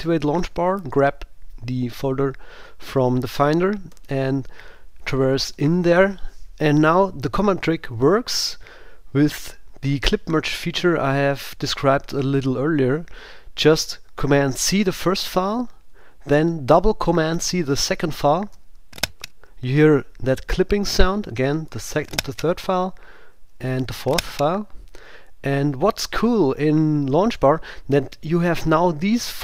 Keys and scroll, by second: 0.8 super+g, 4.0 Right, 14.7 super+c, 16.0 Down, 18.5 super+c, 21.0 Down, 21.7 super+c, 23.3 Down, 23.7 super+c.